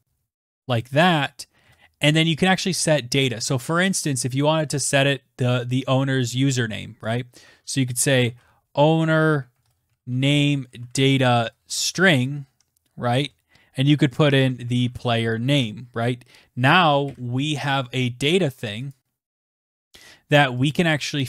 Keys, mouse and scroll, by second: 0.0-0.5 typing, 5.4-15.9 typing, 15.1 Right, 17.3 click, 17.7-20.0 typing, 19.0 click.